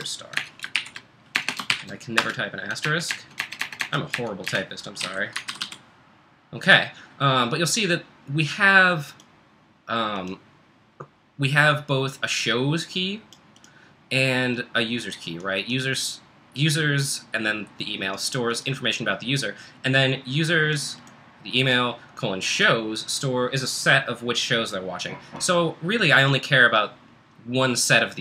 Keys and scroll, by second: 0.0-6.1 typing, 8.4-9.1 typing.